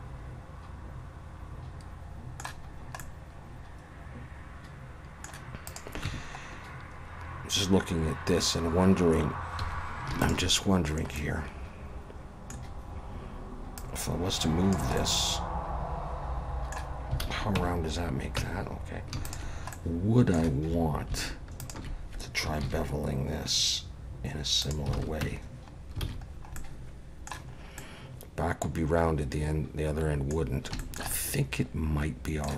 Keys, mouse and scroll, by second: 3.0 middle click, 5.7 click, 6.5 Tab, 6.5-7.1 scroll up 4, 7.6 scroll up 3, 9.6 2, 10.2 alt+shift+click, 10.7 scroll down 2, 11.2 middle click, 12.6-13.3 scroll down 2, 13.8 click, 15.0 middle click, 17.2 alt+a, 17.6 Tab, 18.4 Tab, 19.2 alt+shift+click, 19.7 middle click, 21.6 alt+shift+click, 22.6 ctrl+b, 25.0 alt+a, 25.2 Tab, 25.9-26.6 scroll down 5, 26.1 alt+a, 26.6 middle click, 27.5 scroll up 2, 27.8 middle click, 30.5 scroll down 1, 30.8 shift+middle click, 31.1 middle click.